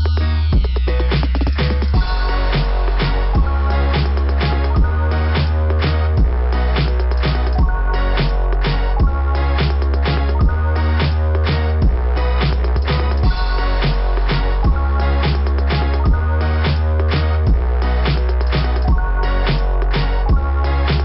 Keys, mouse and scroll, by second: 0.1 click, 0.3 click, 0.7-1.1 scroll down 2, 4.2 scroll up 2, 5.1 right click, 5.3 right click, 5.5 right click, 6.5 click, 7.6 click, 7.8 click, 8.0 double click, 8.4 1, 8.8 double click, 9.4 Return, 9.4 1, 11.0 click, 12.3 click, 13.0 click, 13.1 click, 13.8 alt+,, 15.6 scroll down 2, 17.1 click.